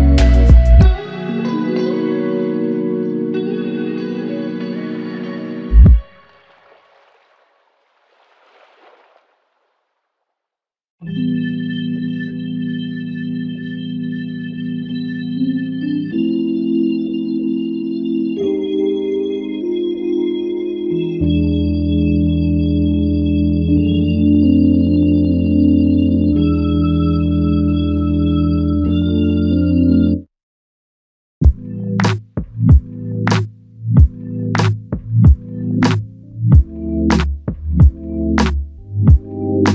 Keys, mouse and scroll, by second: 10.9 ctrl+click, 14.3 alt+click, 15.6 ctrl+click, 17.9 ctrl+click, 20.1 alt+click, 20.7 alt+click, 25.2 ctrl+z, 28.4 typing, 31.7-32.5 typing, 33.9 alt+click.